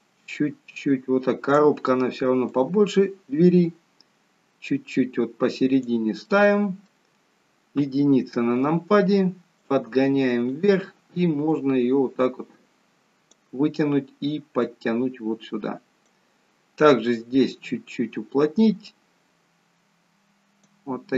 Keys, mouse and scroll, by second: 1.5 click, 2.5 click, 6.2 middle click, 7.8 KP_1, 9.6 click, 11.5 click, 17.1 click.